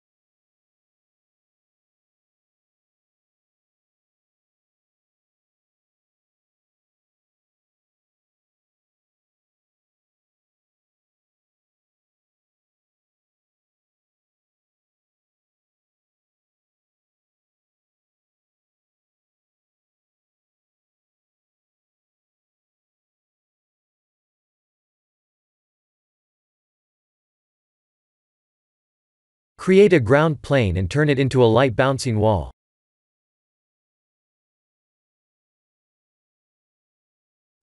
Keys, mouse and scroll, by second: 0.2 s, 1.2 shift+d, 2.1 click, 2.3 s, 3.2 shift+d, 4.5 s, 5.5 shift+d, 7.4 s, 8.7 click, 9.1 middle click, 9.7 click, 11.3 ctrl+z, 12.6 click, 15.5 ctrl+z, 15.9 ctrl+z, 17.3 click, 20.0 click, 20.3 middle click, 22.7 scroll down 3, 22.8 scroll up 1, 22.9 scroll down 1, 23.1 click, 23.4 middle click, 24.3-24.9 scroll down 2, 24.9 middle click, 26.9 click, 27.3 shift+middle click, 27.8 middle click, 29.7 click, 34.7 s, 36.9 click.